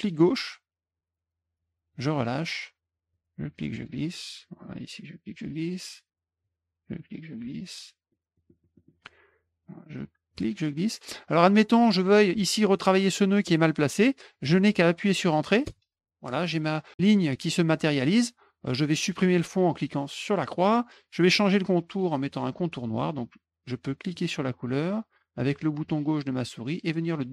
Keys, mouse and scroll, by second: 3.1 click, 4.6 click, 6.4-7.7 drag, 8.1 middle click, 8.5 middle click, 8.7 middle click, 10.3 click, 15.6 Return, 20.2 click, 24.1-27.3 drag.